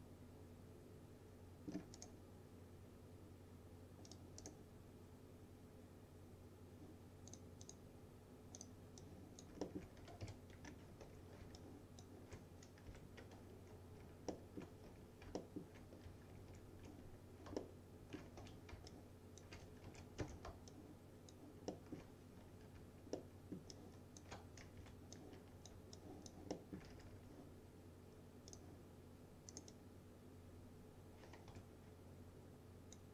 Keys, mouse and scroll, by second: 2.0 right click, 4.1 click, 4.5 right click, 7.4 click, 9.7 alt+middle click, 9.8-10.8 typing, 10.7-11.1 scroll down 2, 11.1 F3, 11.6-12.2 alt+drag, 13.0 Delete, 13.5 space, 14.4 alt+middle click, 14.9 F3, 15.4 alt+middle click, 16.4 ctrl+z, 17.6-18.3 alt+middle click, 18.5 F3, 19.0-19.6 alt+click, 19.9 ctrl+z, 20.3 space, 20.8-21.7 alt+click, 21.8 alt+middle click, 23.2-24.4 alt+middle click, 23.8 alt+click, 24.9 Delete, 25.2-25.8 click, 26.0-26.9 alt+click, 26.6 alt+middle click, 26.8-27.7 typing, 28.6 click, 29.6 right click, 29.8-33.1 drag, 31.6 F3.